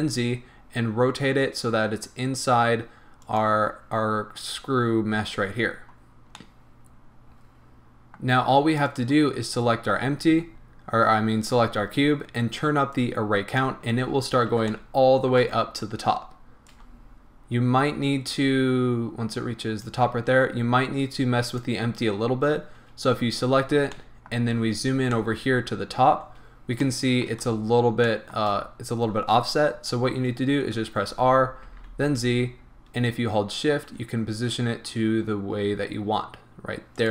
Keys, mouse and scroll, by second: 3.4 click, 6.4-8.8 middle drag, 8.8 click, 13.0-14.7 drag, 13.9-14.7 scroll down 2, 14.7-16.7 shift+middle drag, 16.7-21.6 drag, 23.9-37.1 shift+middle drag, 24.6-25.2 scroll up 2, 26.3-26.9 scroll down 2, 31.2 r.